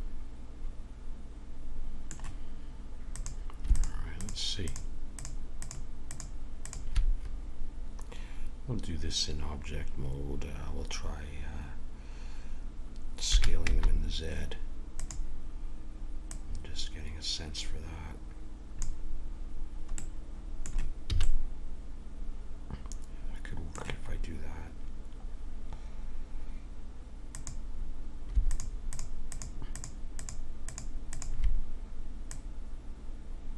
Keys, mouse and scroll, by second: 3.1-8.5 drag, 13.3 s, 16.3-18.1 drag, 20.0-22.2 middle drag, 21.1 a, 24.0 middle click, 27.2-33.5 drag.